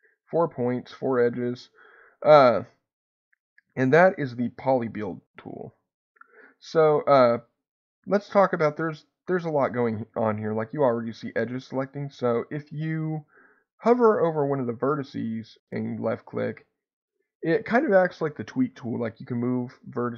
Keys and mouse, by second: 14.7-20.1 drag.